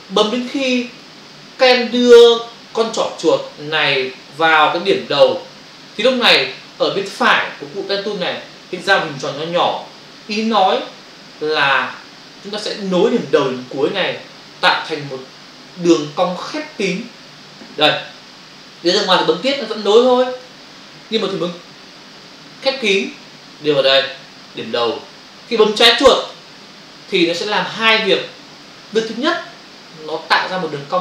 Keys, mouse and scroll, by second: 19.4 click, 19.5 click, 26.1 click, 26.3 click.